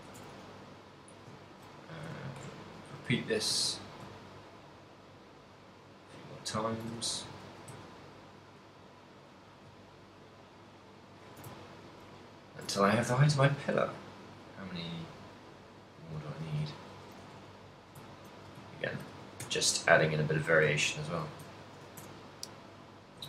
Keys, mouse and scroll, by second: 0.1 click, 0.3 r, 1.2 click, 1.4 ctrl+middle click, 1.9 g, 2.8 shift+click, 3.2 alt+d, 6.9 shift+click, 7.2 shift+middle click, 7.5 alt+d, 11.3 shift+click, 11.9 ctrl+middle click, 11.9 shift+a, 12.3 ctrl+middle click, 12.8 a, 13.7 middle click, 15.4 middle click, 16.1 KP_1, 16.9 right click, 17.3 r, 17.9 shift+click, 18.2 ctrl+middle click, 18.5 r, 19.1 shift+click, 19.6 g, 19.9 shift+click, 20.5 r, 21.2 shift+click, 21.4 g, 21.8 shift+click, 22.0 r, 23.1 shift+click.